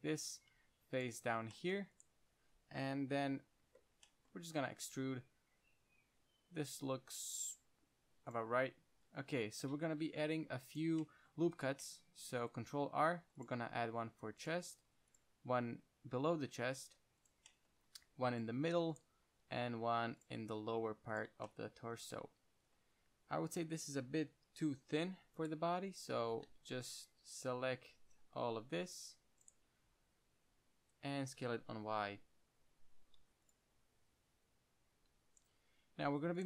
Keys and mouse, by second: 0.8 ctrl+Tab, 2.2-3.3 right drag, 3.3 KP_1, 3.9-5.1 middle drag, 5.1 e, 8.6-10.5 drag, 10.4 ctrl+Tab, 11.3 drag, 13.1 ctrl+r, 14.8-16.5 drag, 15.1 ctrl+r, 17.6-19.3 drag, 18.2 ctrl+r, 19.3-19.7 middle drag, 19.7 ctrl+r, 21.5 drag, 21.8-22.2 middle drag, 22.3 middle click, 24.9 KP_3, 25.7-28.1 drag, 26.4 z, 26.8 c, 29.7-31.6 drag, 30.0 z, 31.6 s, 33.8-35.6 drag.